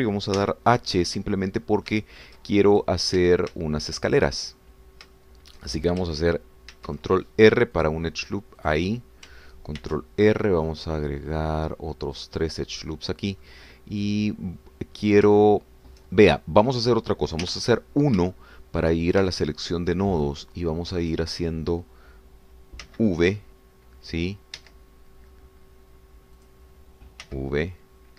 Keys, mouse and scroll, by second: 1.4 h, 2.0 click, 2.7 scroll up 2, 3.0-4.0 shift+drag, 4.2 shift+Tab, 4.8 shift+click, 5.4-6.0 shift+scroll up 3, 6.1 shift+click, 7.7 ctrl+r, 8.8 click, 9.6 click, 10.8 ctrl+r, 11.3 ctrl+scroll up 3, 12.4 scroll up 2, 13.2 click, 13.7 click, 14.4-16.4 middle drag, 16.4-17.8 shift+middle drag, 18.4 1, 18.8-19.2 scroll up 3, 19.4 shift+click, 20.3 ctrl+shift+click, 22.2 click, 23.9 v, 25.6 Escape, 27.4 click.